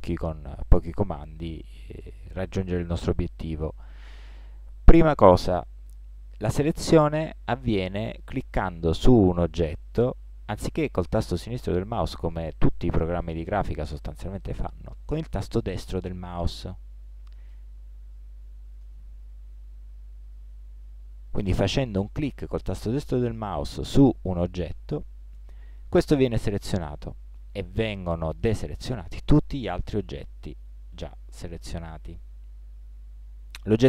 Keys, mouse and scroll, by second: 17.6-26.2 right drag, 29.7-32.1 right drag.